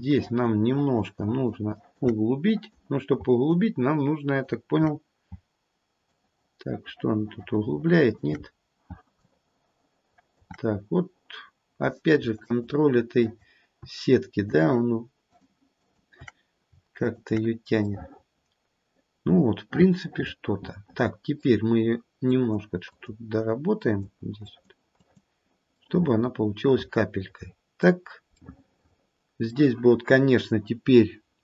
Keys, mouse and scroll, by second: 0.1 alt+click, 0.6 alt+click, 1.1 alt+click, 1.7 alt+click, 2.4 click, 3.5 alt+click, 6.1 alt+click, 8.4-8.8 scroll up 4, 10.4 alt+click, 10.6-11.5 scroll down 2, 11.5-12.2 scroll down 2, 12.4 shift+click, 13.2 shift+click, 14.5 shift+click, 15.3 shift+click, 15.7 shift+click, 17.0 shift+click, 17.9 middle click, 18.2 middle click, 18.8 middle click, 19.7 middle click, 22.3 click, 23.8 click, 24.4 click, 25.0 click, 25.8 middle click, 26.1 middle click, 26.3 middle click, 26.8 middle click, 28.3 middle click.